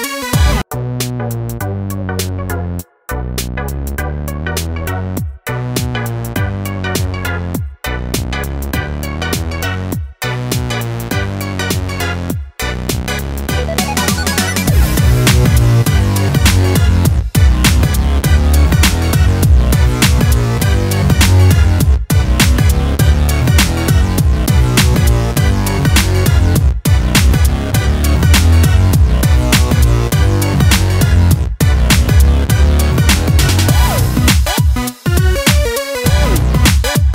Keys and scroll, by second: 25.9 alt+Delete.